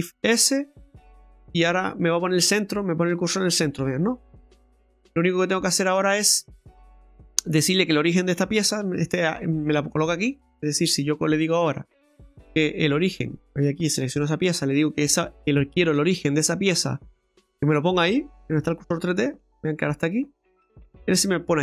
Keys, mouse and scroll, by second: 1.3 middle click, 6.1-6.6 scroll up 1, 6.8 middle click, 8.6 Tab, 10.4 middle click, 12.0 right click, 14.9 click, 19.1 middle click, 20.7 middle click.